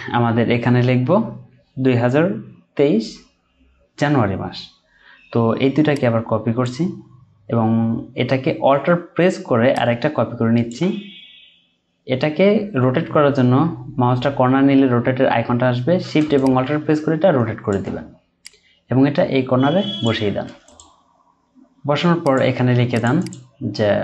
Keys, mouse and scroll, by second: 9.7 alt+click, 20.6 Right, 23.2 double click.